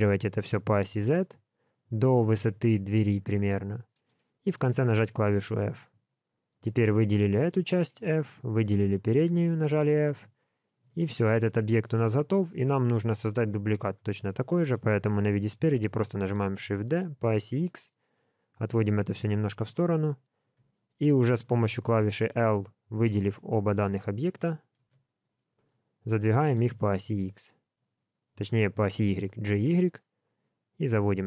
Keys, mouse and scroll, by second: 4.2 middle click, 4.9 f, 6.1 alt+click, 7.6 f, 8.3 alt+click, 9.3 f, 9.9 alt+a, 10.2 middle click, 10.9 alt+z, 14.7 l, 14.7 KP_1, 16.4 shift+d, 19.9 middle click, 20.7 shift+middle click, 23.0 j, 25.3 middle click.